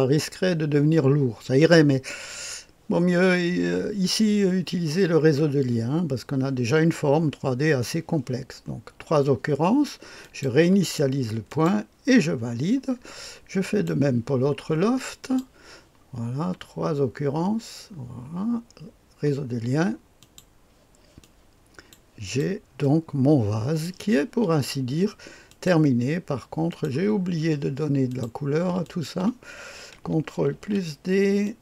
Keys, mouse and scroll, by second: 10.1 click, 11.4 click, 13.5 click, 15.2 click, 20.1 click, 21.1 click, 22.1 click, 22.7-23.8 drag, 25.4 click, 26.6 click, 28.0 click, 28.8 ctrl+click, 30.4 ctrl+d, 31.3 click.